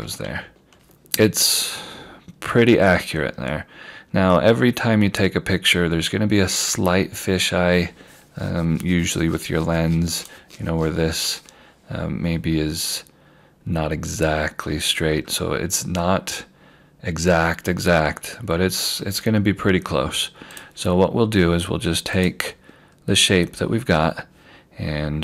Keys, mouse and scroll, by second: 0.7 q, 1.5 scroll down 1, 4.1 scroll up 1, 5.6 scroll down 1, 6.5 scroll up 1, 10.2 click, 15.1 scroll down 1, 16.0 scroll up 1, 17.0 scroll down 1, 18.7 scroll up 1, 20.6 click.